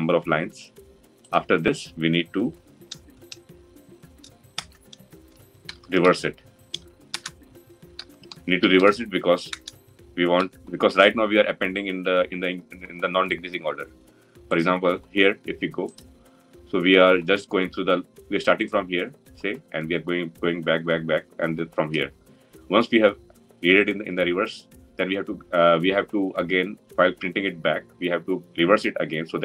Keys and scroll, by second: 6.9 Return.